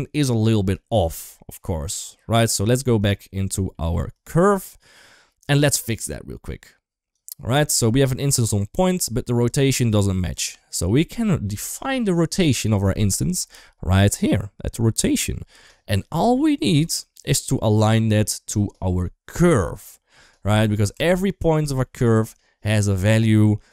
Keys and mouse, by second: 0.0 middle click, 1.4 middle click, 2.1 click, 2.3 right click, 3.6 middle click, 4.0 click, 4.7 click, 5.0 click, 6.3 click, 7.5 click, 7.7 click, 8.9 click, 9.8 click, 11.5 shift+middle click, 20.8 Tab, 21.6 shift+middle click.